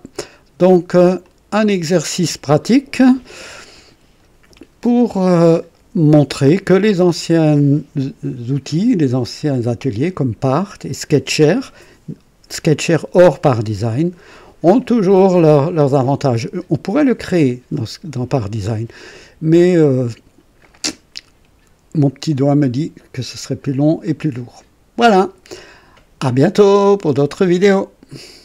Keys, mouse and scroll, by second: 0.7 right click, 1.2 click, 3.7 right click, 22.9-24.0 right drag, 24.0-25.2 drag, 27.5 right click.